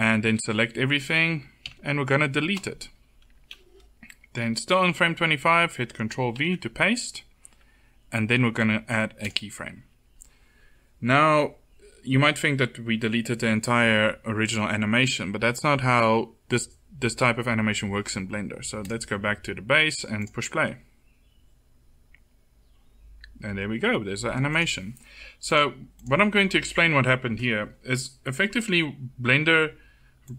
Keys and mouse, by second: 0.1 a, 1.4 Delete, 6.2 ctrl+v, 9.0 click, 9.4-21.8 drag, 24.2-30.3 drag.